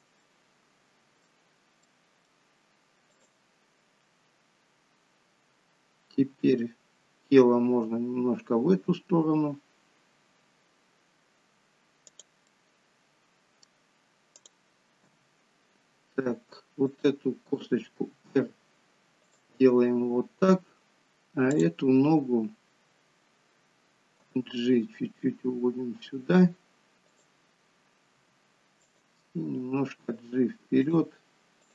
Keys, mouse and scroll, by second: 0.1 middle click, 1.7 middle click, 3.0 click, 12.4 middle click, 14.2 click, 14.9 g, 17.9 r, 21.4 click, 24.2 g, 28.1 r, 29.4 g, 31.5 click.